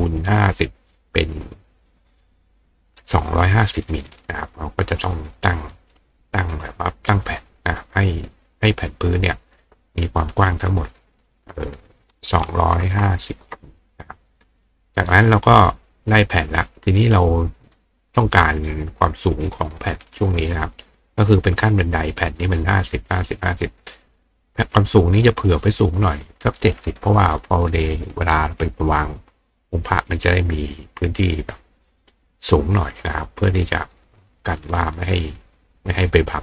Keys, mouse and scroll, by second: 5.3 click, 5.7 right click, 6.4 click, 11.2 click, 14.9 click, 15.9-16.4 drag, 17.3 click, 18.2 click, 19.1 click.